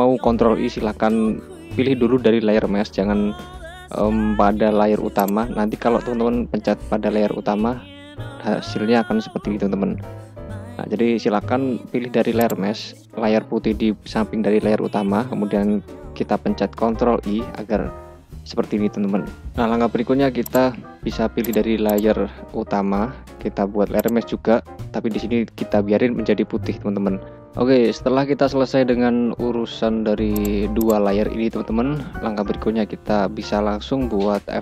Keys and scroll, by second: 3.6 ctrl+i, 8.7 ctrl+i, 16.5 ctrl+i.